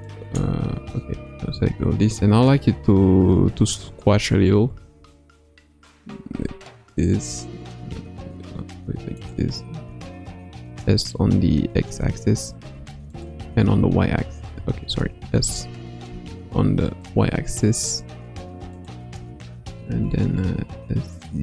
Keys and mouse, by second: 0.3 shift+click, 1.1 a, 4.7 s, 9.8 s, 13.5 x, 15.3 s, 19.7 g.